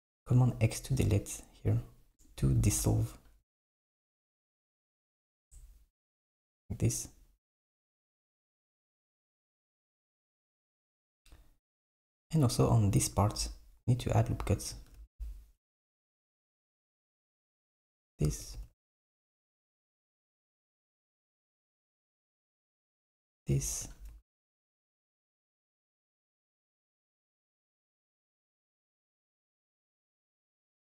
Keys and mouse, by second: 2.2 click, 2.7 x, 5.4 x, 7.9 s, 15.0 r, 18.6 ctrl+b, 24.1 r, 30.6 alt+b.